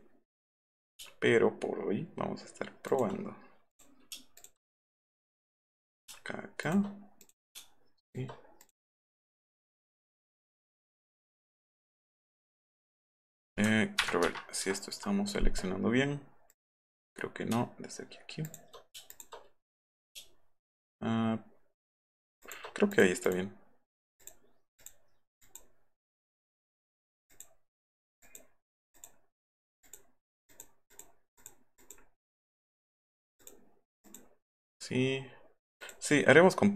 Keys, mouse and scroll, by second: 2.9 shift+click, 3.7 click, 4.4 shift+click, 5.2 click, 6.6 shift+click, 7.2 click, 8.1 shift+click, 8.6 click, 9.3 click, 9.7 click, 10.4 click, 10.8 click, 11.6 click, 11.9 click, 14.0 ctrl+-, 14.4 ctrl+-, 14.6 ctrl+-, 16.5 click, 18.5 shift+click, 19.1 shift+click, 22.4 shift+click, 22.9 click, 23.3 click, 24.2 click, 24.8 click, 25.4 click, 27.3 click, 27.8 click, 28.2 click, 29.0 click, 29.9 click, 30.5 click, 30.9 click, 31.4 click, 31.8 click, 33.4 click, 34.0 click, 35.8 click.